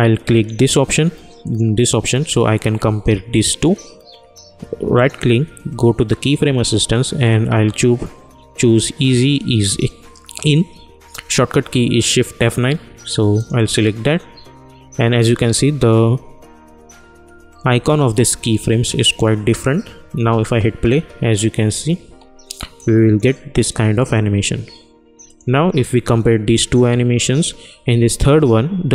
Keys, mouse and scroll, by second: 4.9 right click, 8.9 -, 13.3 click, 20.1 space, 22.7 click, 28.8 click.